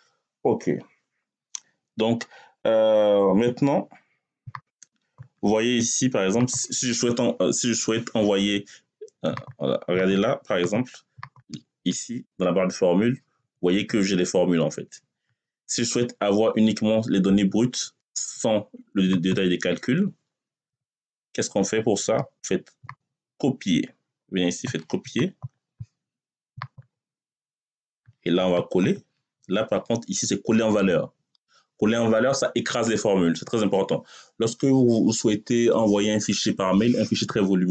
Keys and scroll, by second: 20.5 Return.